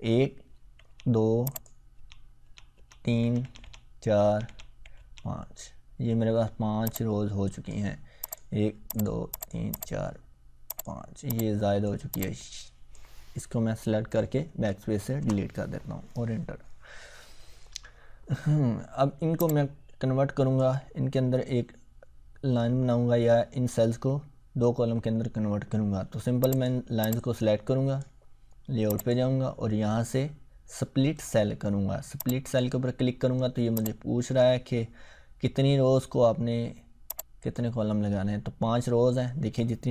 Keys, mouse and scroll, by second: 0.8 Tab, 1.5 click, 2.0 Tab, 7.2-7.8 click, 14.5 BackSpace, 14.9 Return, 19.4-20.7 drag, 26.4-28.0 drag, 32.2-34.4 drag, 37.1 click.